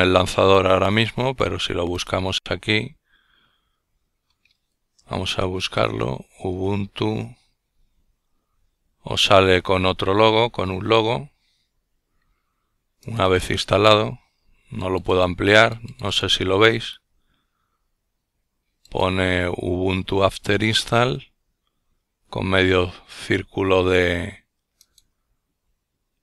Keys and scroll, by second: 4.7-6.2 typing.